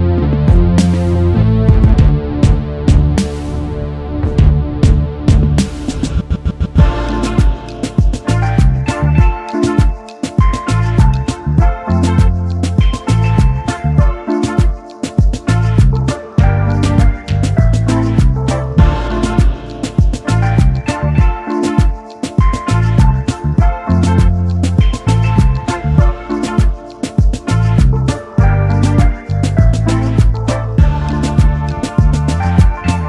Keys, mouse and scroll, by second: 2.8 ctrl+z, 3.5 alt+click, 6.7 alt+click, 8.6 double click, 11.3-13.2 scroll up 1, 19.4 ctrl+z.